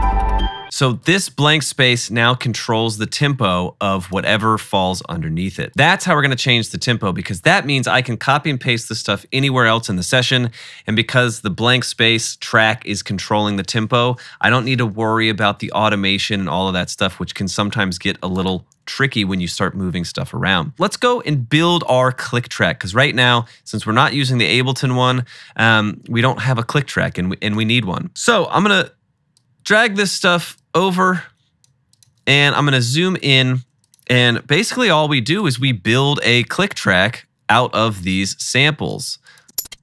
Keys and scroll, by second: 0.0-0.6 typing, 20.9 =, 32.3 =, 32.4 =, 34.6 =, 39.5 space, 39.7 space.